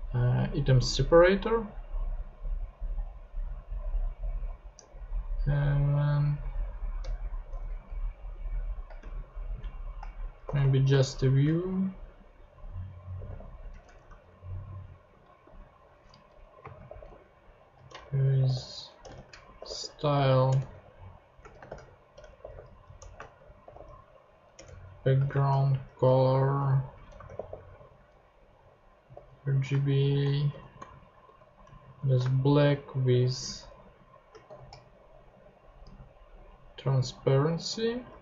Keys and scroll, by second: 7.0 Return, 9.0-11.4 typing, 12.9-13.8 typing, 15.4 /, 16.1 Left, 16.6-20.1 typing, 20.5 Return, 21.4 shift+Return, 21.5-24.2 typing, 24.5 Return, 25.1 shift+Return, 25.2-34.9 typing, 35.8 Right, 36.3 Left, 37.7 Right.